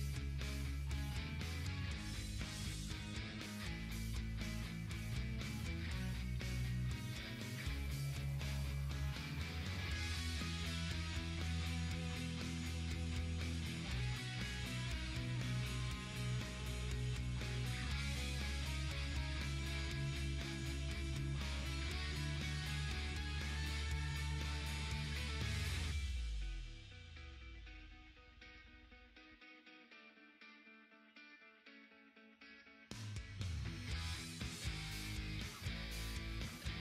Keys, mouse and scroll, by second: 3.0-4.8 drag, 7.1-11.0 ctrl+drag, 11.0 ctrl+t, 11.5-18.0 drag, 18.0 Down, 21.3 ctrl+t, 22.1-24.6 drag, 27.3 click, 32.2-35.7 drag, 35.7 ctrl+z, 36.1-36.8 typing, 36.4-36.8 drag.